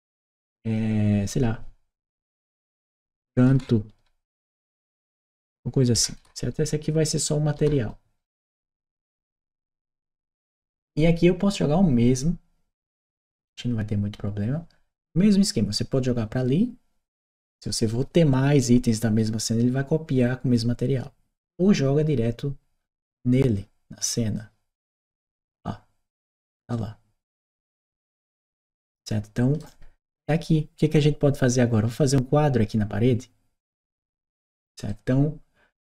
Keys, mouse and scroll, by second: 0.0 click, 3.3 shift+c, 3.8 c, 8.1 Return, 24.1 click, 26.5-29.4 right drag, 34.7-35.8 right drag.